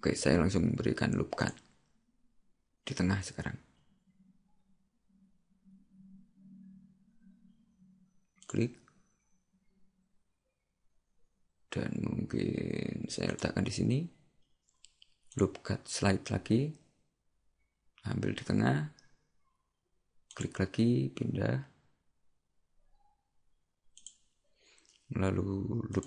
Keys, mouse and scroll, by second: 1.5 click, 15.3 click, 25.9 click.